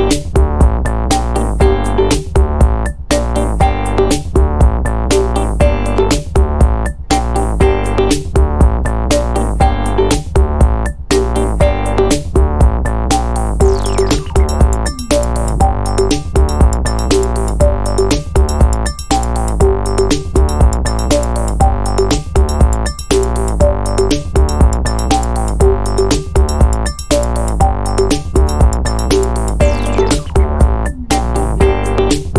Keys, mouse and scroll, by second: 0.5-3.2 drag, 3.0 o, 4.0 ctrl+click, 4.6 ctrl+click, 5.1 ctrl+right click, 6.0 click, 6.5 click, 7.2-10.6 drag, 10.9 ctrl+click, 11.4 ctrl+click, 11.7 ctrl+right click, 12.7 click, 13.3 click, 14.0-15.5 drag, 15.6 0, 16.4-16.8 scroll down 1, 17.0-17.3 scroll up 2, 17.8 scroll down 2, 18.4 scroll up 2, 19.7 ctrl+click, 20.2 ctrl+click, 20.9 ctrl+click, 22.0 click, 22.6 click, 23.5-27.6 drag, 28.2 ctrl+click, 28.8 ctrl+click, 29.2 ctrl+right click, 30.2 click, 30.8 click, 31.4-32.3 drag.